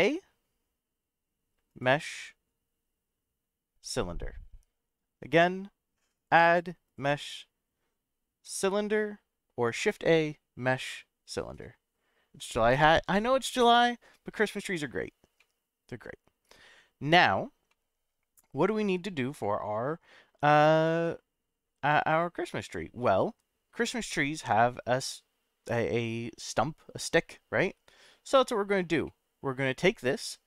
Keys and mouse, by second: 6.1-14.8 drag, 15.4-16.6 middle drag, 17.7-19.4 middle drag, 29.0-30.4 middle drag.